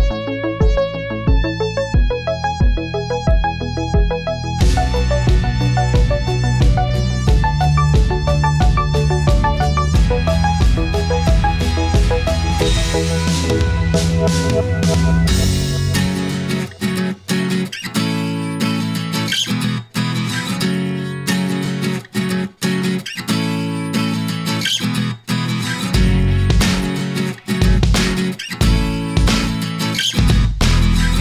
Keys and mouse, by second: 1.1 middle click, 3.3 click, 4.2 middle click, 5.8-6.8 drag, 7.0-8.2 middle drag, 9.8 click, 12.4-17.1 middle drag, 18.3 click, 19.0 click, 19.6 click, 21.9 click, 23.3-25.2 middle drag, 25.9-26.8 middle drag, 27.6 middle click, 29.2-31.2 middle drag.